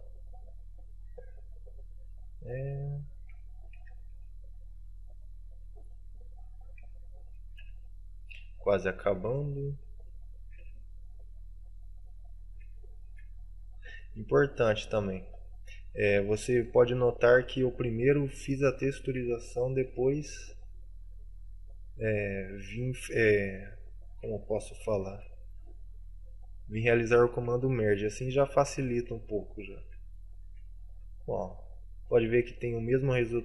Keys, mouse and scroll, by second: 1.0 middle click, 3.2 right click, 3.9 shift+right click, 4.2 w, 5.8 middle click, 6.7 right click, 7.3 shift+right click, 7.7 w, 8.4 middle click, 9.3 right click, 10.1 shift+right click, 10.4 right click, 10.7 w, 11.4 middle click, 12.1 middle click, 12.9 shift+middle click, 13.3 scroll down 2, 13.7 middle click, 14.0 scroll down 1, 14.2-15.1 scroll up 1, 15.5 middle click, 16.4 right click, 17.7 w, 19.1 right click, 19.3 right click, 19.9 shift+right click, 20.3 w, 21.1 middle click, 23.7 right click, 24.0 right click, 24.8 shift+right click, 25.3 w, 26.0 middle click, 27.3 right click, 28.1 shift+right click, 28.2 shift+right click, 29.1 right click, 29.5 shift+right click, 29.9 w, 30.7 shift+middle click, 31.5 scroll up 2, 31.7 middle click, 32.5 Tab, 32.6 middle click.